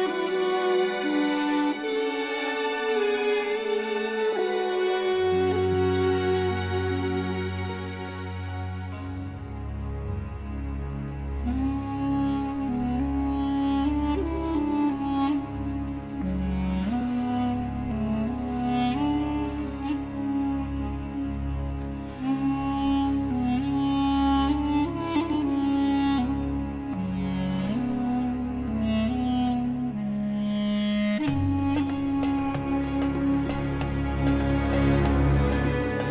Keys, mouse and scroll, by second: 1.5 click, 2.1-2.5 scroll up 2, 2.8-3.4 scroll down 2, 4.6 click, 5.4 m, 10.5 click, 12.5 click, 16.7 click, 17.2 m, 20.8 click, 21.7 click, 22.5 Escape, 24.2 scroll down 2, 24.9 scroll up 2, 27.4 click, 28.5 click, 31.7 click, 33.4 click, 34.7 click.